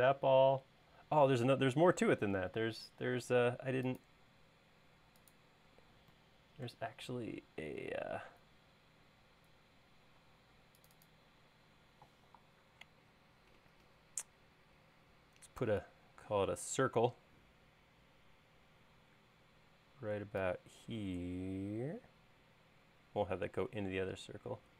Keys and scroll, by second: 10.3 space, 12.5 l, 15.7 c.